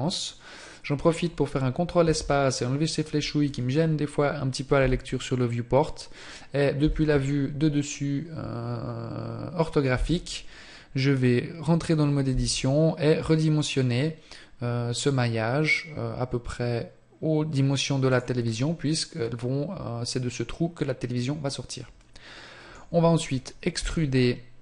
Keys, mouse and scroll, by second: 0.3-2.1 scroll down 1, 2.1 ctrl+space, 4.8 KP_7, 6.9 KP_5, 10.0 Tab, 18.2 click, 18.5 middle click.